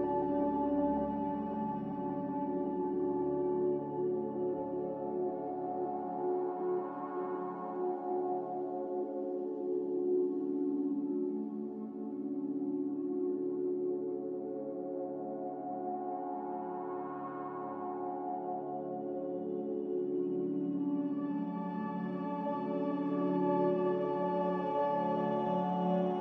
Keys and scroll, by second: 11.9 z, 13.8 5, 13.9 Return, 17.1 a.